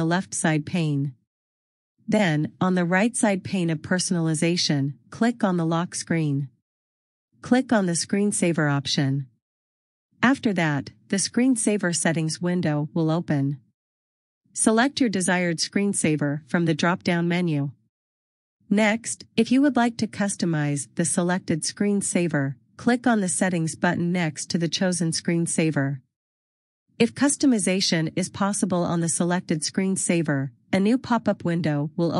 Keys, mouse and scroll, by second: 3.0-3.4 scroll down 1, 7.1 click, 10.6-11.1 scroll down 1, 12.9 click, 17.3 click, 20.2 click.